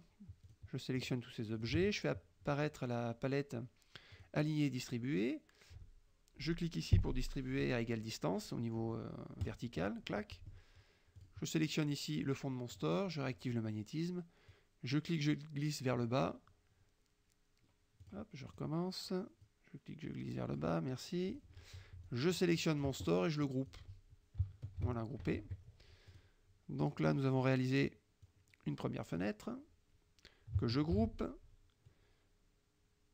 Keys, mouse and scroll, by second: 0.6 shift+click, 1.1 shift+click, 1.6 shift+click, 4.2 click, 9.5 click, 10.2 middle click, 11.3 click, 12.8 click, 14.6-16.2 drag, 18.1 click, 18.6 click, 19.5-20.8 drag, 21.3 click, 22.1-24.0 drag, 24.9 ctrl+g, 25.3 ctrl+KP_Subtract, 26.1 click, 26.9 click, 27.4-28.3 scroll up 1, 28.3-29.4 drag, 29.4-30.6 scroll up 1, 30.6-31.6 ctrl+scroll up 1, 31.0 ctrl+g, 31.6-32.0 scroll up 1.